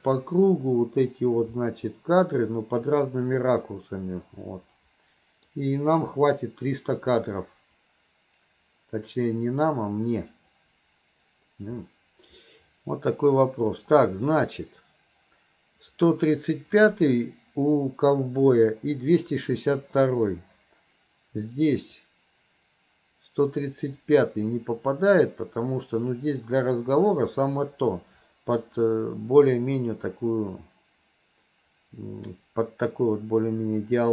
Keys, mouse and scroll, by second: 1.7-5.5 middle drag, 11.9-13.1 middle drag, 21.9 click, 24.0-34.1 drag.